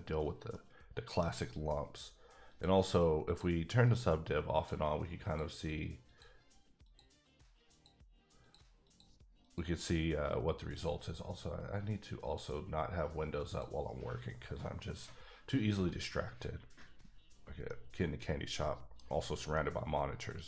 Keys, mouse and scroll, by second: 0.5 middle click, 1.3 scroll down 1, 2.5 click, 3.3 click, 3.8 click, 4.5 click, 5.2 click, 6.0 click, 6.8 click, 7.7 click, 8.5 click, 8.8 click, 9.4 click, 9.8 click, 12.2 click, 13.4 click, 17.6 click, 17.8-19.2 middle drag, 19.5 middle click.